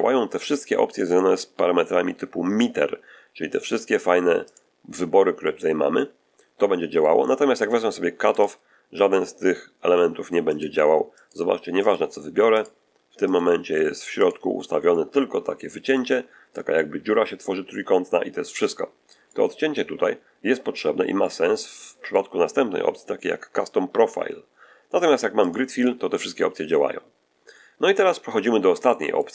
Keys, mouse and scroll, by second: 3.4 click, 4.4 click, 5.9-7.1 middle drag, 8.2 click, 10.4 click, 11.1 click, 11.7 click, 12.5 click, 13.2 click, 14.1 click, 14.8-16.0 middle drag, 16.1-16.4 scroll up 1, 16.6-20.9 middle drag, 21.1-22.2 middle drag, 25.3 click, 27.2-27.5 scroll down 1, 27.9 middle click, 28.8 middle click.